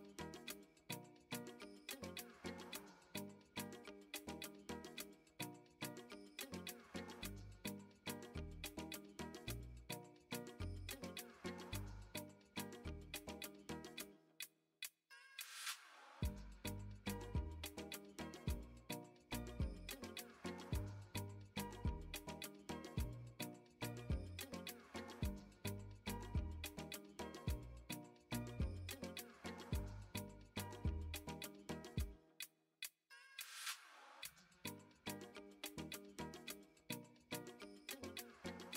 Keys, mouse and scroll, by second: 11.6-16.2 drag, 17.1 shift+middle click, 19.0 3, 19.3 click, 19.7 shift+middle click, 20.4 middle click, 24.7 e, 27.9-37.3 drag, 37.7 middle click, 38.5 shift+middle click.